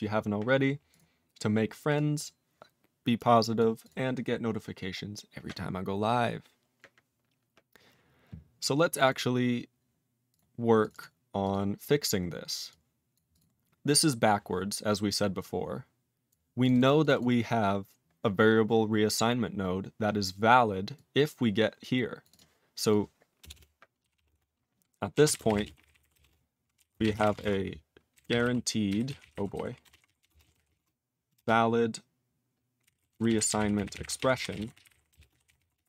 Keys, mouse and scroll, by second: 0.9 click, 1.5 click, 1.9 click, 1.9 click, 2.2 click, 3.6 click, 3.8 click, 3.9 click, 5.0 scroll down 2, 6.1-6.7 scroll down 2, 6.7-7.6 scroll down 2, 7.6-8.9 scroll down 2, 8.9 click, 8.9 click, 9.0 double click, 9.1 double click, 9.4 scroll up 4, 10.3 click, 10.8 click, 10.8 click, 10.9 double click, 11.0 double click, 11.4 click, 11.5 click, 11.6 scroll down 2, 12.7 click, 13.1 click, 13.3 click, 13.4 click, 13.5-14.6 scroll down 5, 14.9 click, 16.3 click, 16.6 click, 16.6 click, 16.7 double click, 17.0 click, 17.0 click, 17.1 double click, 17.2 double click, 20.9 click, 22.2 click, 22.3 click, 22.3 click, 22.8 click, 22.9 click, 23.4 Return, 23.5 Return, 24.0-31.3 typing, 32.6-35.8 typing.